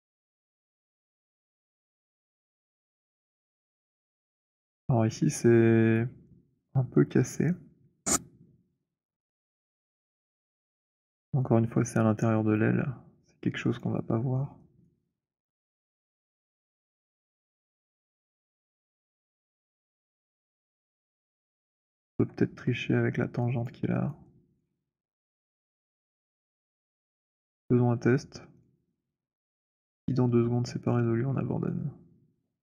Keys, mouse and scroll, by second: 0.4 click, 1.7 alt+right click, 2.9 alt+right click, 3.1 alt+click, 3.8 alt+click, 3.8 alt+middle click, 4.3 alt+right click, 5.9 click, 9.8-10.7 drag, 10.9-13.3 drag, 14.0 click, 14.3 alt+click, 14.3 alt+middle click, 15.1 alt+right click, 20.8 alt+right click, 22.1 alt+click, 23.5 alt+click, 24.2 alt+right click, 24.7 alt+click, 25.1 alt+middle click, 26.3 alt+right click, 26.6 click, 27.2 click, 27.6 alt+click, 28.5 shift+click, 29.0 shift+click, 31.5 right click.